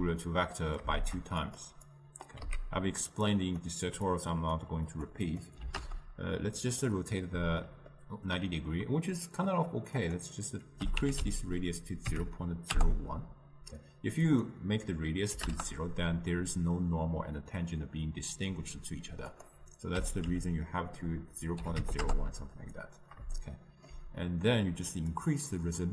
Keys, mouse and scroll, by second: 0.0 a, 1.0 shift+d, 2.5 x, 5.0-6.9 drag, 6.9-12.8 middle drag, 12.8-23.5 drag, 23.5-25.3 ctrl+middle drag, 25.3-25.9 drag.